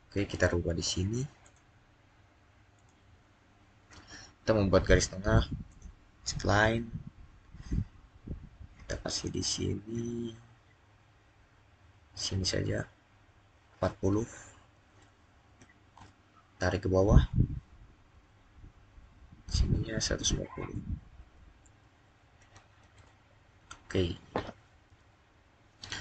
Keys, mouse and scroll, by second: 5.5 click, 14.6 click, 15.0-15.8 typing, 21.0 Return, 21.2-22.2 typing, 22.8 Return.